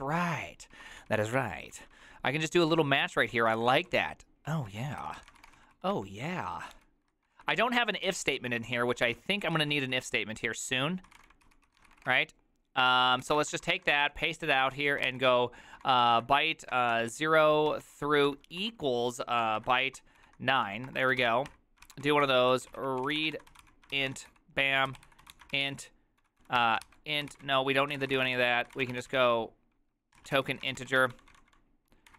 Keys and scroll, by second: 0.0-14.1 typing, 8.1 ctrl+c, 9.2 ctrl+c, 15.2-32.1 typing.